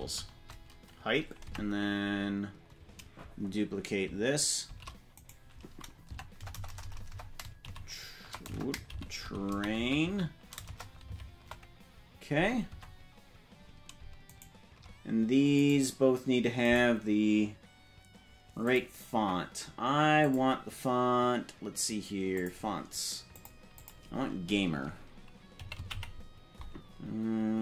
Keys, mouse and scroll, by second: 0.0-0.1 typing, 1.4 Tab, 4.7 shift+d, 6.0 Tab, 6.3-11.0 typing, 12.7 Tab, 14.3 shift+right click, 15.6 right click, 16.7 right click, 18.6 click, 20.2 click.